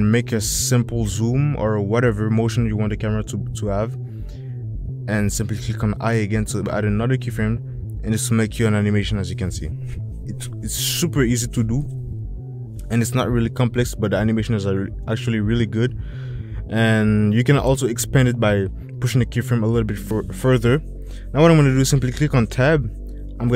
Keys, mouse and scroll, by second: 5.2 shift+click, 7.2 i, 8.6 click, 11.3 space, 16.3 space, 16.7 click, 17.7 click, 20.7 Tab.